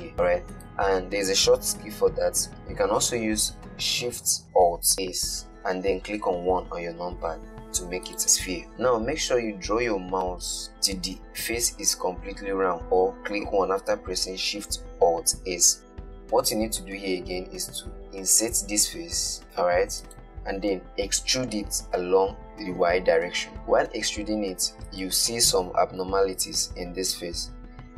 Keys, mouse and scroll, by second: 5.2 alt+shift+s, 18.5 i, 21.8 e, 25.6-27.9 middle drag.